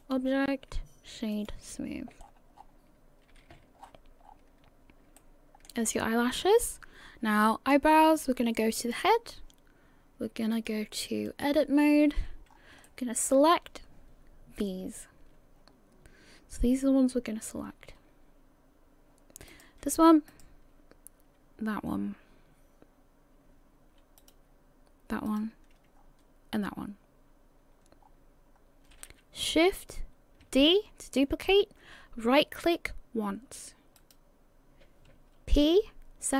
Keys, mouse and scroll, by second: 0.0 click, 2.2-3.0 scroll up 13, 3.3 a, 3.8 scroll up 1, 3.8-4.7 scroll down 14, 4.7-5.1 scroll up 2, 5.2 shift+middle click, 6.6-7.4 scroll down 10, 8.8 click, 11.4 click, 12.0 a, 12.5 scroll up 3, 12.5 a, 12.8 shift+middle click, 19.5 right click, 20.3 shift+right click, 24.2 shift+right click, 25.3 shift+right click, 26.0-28.0 scroll down 4, 28.0-28.4 scroll down 2, 28.6-29.5 scroll, 29.5 scroll up 1, 30.5 shift+d.